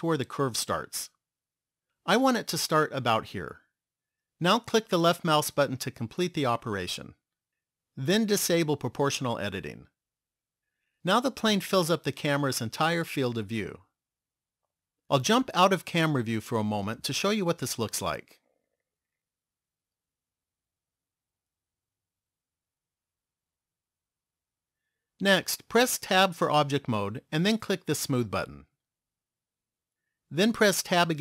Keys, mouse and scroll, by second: 8.4 click, 15.9 KP_0, 16.7-17.5 scroll down 2, 17.5 middle click, 19.8 scroll down 1, 20.3 middle click, 23.7 KP_0, 26.5 Tab, 28.8 click.